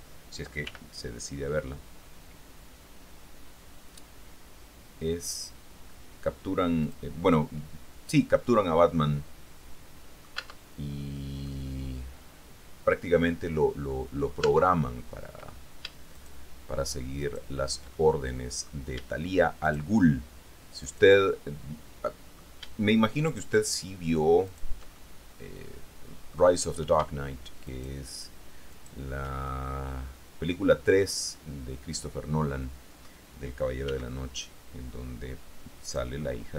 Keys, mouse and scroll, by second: 0.9 g, 7.0 click, 7.4 middle click, 7.6-10.6 drag, 10.5 Tab, 11.6-14.6 drag, 14.6 Tab, 15.5-15.9 scroll up 1, 16.0 scroll, 16.6 shift+right click, 17.4 shift+right click, 18.1 shift+click, 19.8 shift+middle click, 21.0 shift+right click, 21.3-23.0 shift+middle drag, 23.4 shift+right click, 24.7 shift+right click, 25.1-26.7 shift+drag, 27.9 shift+right click, 29.7-31.3 shift+middle drag, 31.5-33.4 middle drag, 34.0 s, 36.0-36.5 drag.